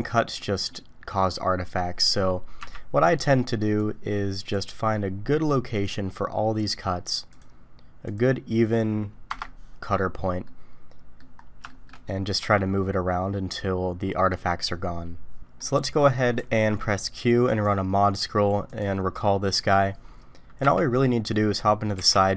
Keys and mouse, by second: 0.3 middle drag, 2.6 KP_3, 3.8 click, 10.4-11.2 middle drag, 11.7 shift+middle click, 12.4 q, 15.2-16.1 middle drag, 16.4 q, 19.2-19.7 middle drag, 20.6 KP_3, 21.9 g.